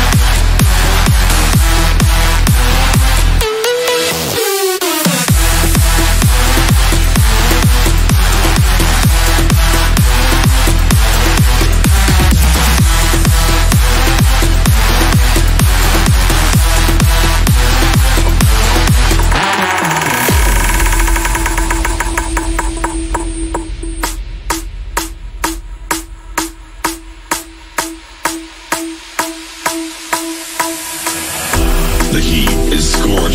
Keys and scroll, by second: 5.6 F3, 23.4 KP_Add.